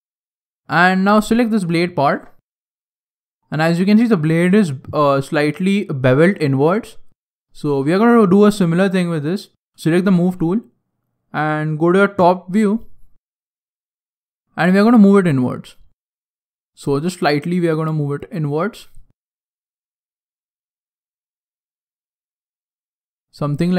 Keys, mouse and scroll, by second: 1.2 alt+right click, 2.0 alt+right click, 2.4 scroll down 2, 2.6 middle click, 2.6 scroll down 1, 3.4-4.0 scroll up 8, 6.7 scroll down 2, 7.0 scroll down 1, 7.0 middle click, 7.5 shift+middle click, 8.0 middle click, 8.2 middle click, 9.2 click, 10.0 click, 10.0 middle click, 12.1 KP_7, 13.0 scroll up 6, 13.4 shift+middle click, 14.3 click, 15.7 middle click, 16.2 middle click, 16.2-16.6 scroll down 2, 16.4 shift+middle click, 17.0 shift+middle click, 17.2 shift+middle click, 17.4 middle click, 18.5 shift+middle click, 19.0 middle click.